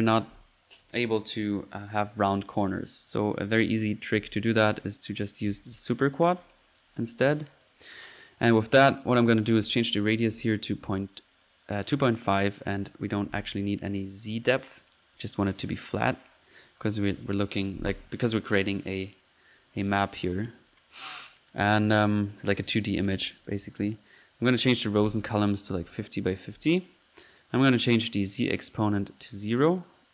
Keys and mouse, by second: 3.7-4.4 drag, 4.3 Delete, 4.6 click, 4.9-5.7 typing, 6.9-7.2 drag, 7.6 click, 9.3 drag, 12.5 click, 14.2 middle click, 14.9 click, 16.2 click, 16.9 click, 17.4 click, 18.1 click, 19.6 click, 20.2 click, 20.8-21.5 drag, 24.4 click, 24.9-25.7 drag, 26.0 click, 28.5-29.0 drag, 29.2 middle click.